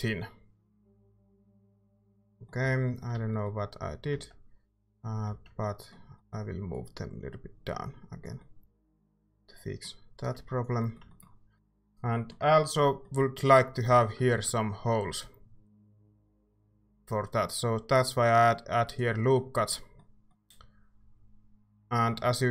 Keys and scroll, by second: 1.4-3.4 typing, 3.1 Tab, 4.1 ctrl+z, 5.3 ctrl+z, 13.9 a, 14.3 ctrl+r.